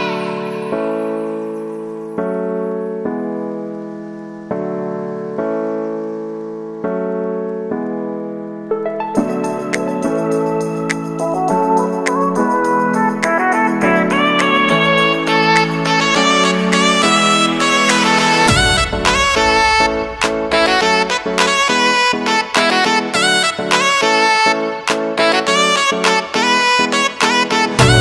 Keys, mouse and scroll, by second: 2.4 ctrl+0, 3.7 click, 7.0 ctrl+a, 9.7-13.1 typing, 15.1 click, 19.8 space, 24.4 space, 25.2 click, 26.3 space.